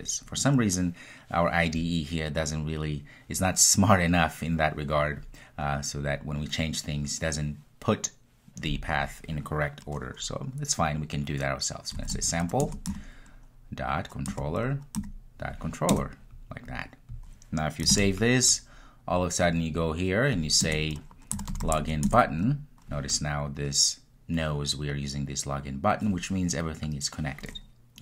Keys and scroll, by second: 12.8 Return, 19.2 super+s.